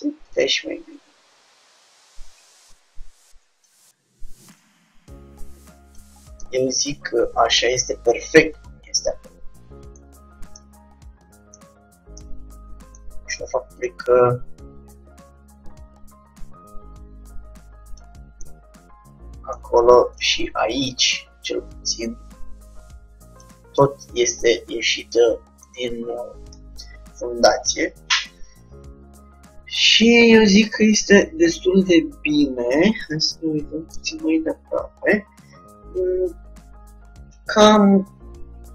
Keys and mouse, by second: 1.9 Tab, 1.9 click, 2.5-4.2 drag, 3.7 z, 4.7-6.3 drag, 6.6-9.1 middle drag, 10.6 z, 10.7-13.9 middle drag, 12.3 z, 13.9-16.7 drag, 18.5-20.4 middle drag, 20.4-22.8 drag, 23.8 middle click, 24.5 middle click, 24.8 Tab, 25.8-27.1 middle drag, 31.3-34.8 middle drag.